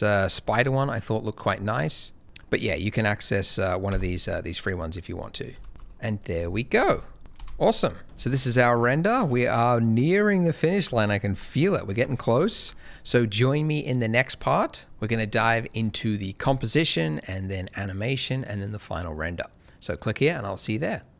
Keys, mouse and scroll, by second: 2.2 middle click, 3.8 n, 4.6 click, 5.0 double click, 5.5 g, 5.6 middle click, 6.1 click, 6.7 alt+a, 7.2 click, 7.3 alt+a, 8.0 shift+middle click, 8.3 ctrl+middle click, 9.3 ctrl+m, 10.9 shift+middle click, 11.4 shift+middle click, 12.4 ctrl+middle click.